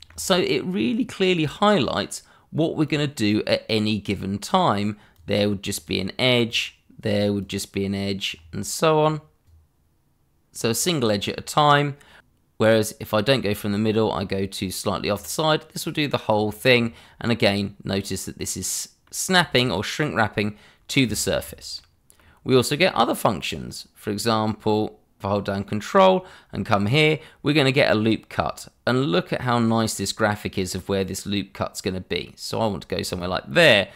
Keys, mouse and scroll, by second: 2.8 click, 15.1 click, 16.7 scroll down 1, 17.0 middle click, 20.3-21.0 scroll up 1, 21.2 shift+middle click, 21.7 middle click, 33.0 click.